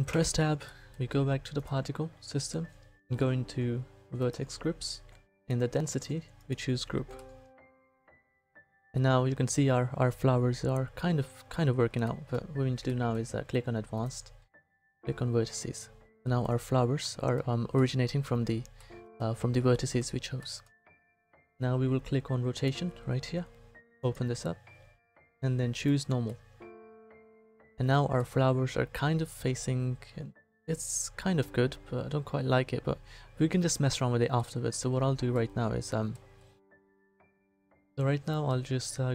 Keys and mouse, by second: 0.1 Tab, 1.6-3.3 middle drag, 4.2-7.3 middle drag, 10.6-12.0 middle drag, 14.0-15.5 middle drag, 15.7-16.7 middle drag, 22.6-26.5 middle drag, 30.2-34.4 middle drag.